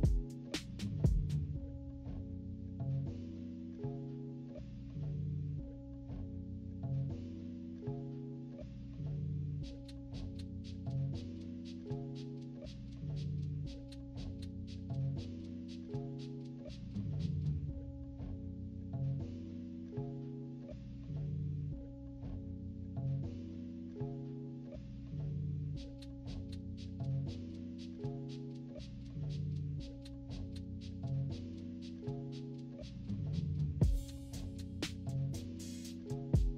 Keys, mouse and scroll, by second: 1.8 -, 2.2 =, 2.7-6.0 drag, 6.0 -, 6.3 =, 6.4 scroll up 1, 7.2-12.2 drag, 12.2 -, 12.4 -, 12.5 =, 12.7 =, 13.3 click, 14.7 z, 15.2-16.5 drag, 17.0-18.3 drag, 18.3 -, 18.9 =, 19.0 =, 19.2 scroll up 4, 19.7 click, 20.5 scroll up 2, 20.9-22.3 drag, 22.7 -, 23.0 =, 23.5-25.7 drag, 25.4-26.9 typing, 26.6-28.4 drag, 28.6 -, 28.8 -, 29.0 =, 29.1 =, 29.6 click, 32.1 click, 33.5 -, 33.8 =, 34.5-35.8 drag, 36.1-36.5 drag.